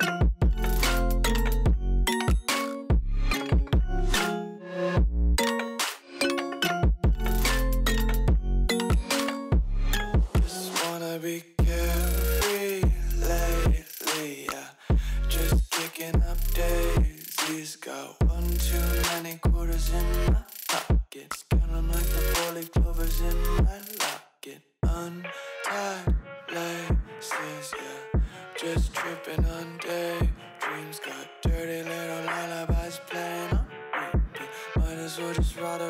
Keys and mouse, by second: 1.3 z, 2.4 click, 3.0 z, 4.7 click, 6.6 click, 7.1 click, 8.1 middle click, 9.1 middle click, 9.7 click, 12.1-12.8 middle drag, 13.3 KP_1, 14.3 click, 16.3-18.7 drag, 19.6 drag, 19.9 middle click, 21.2 click, 21.4 middle click, 21.9 ctrl+a, 23.0 ctrl+a, 24.3 middle click, 24.7 z, 25.4 KP_1, 26.3 shift+middle click, 27.7 click, 29.0-30.7 shift+drag, 32.0 click, 33.3-33.7 middle drag, 34.7 KP_1, 35.5 z.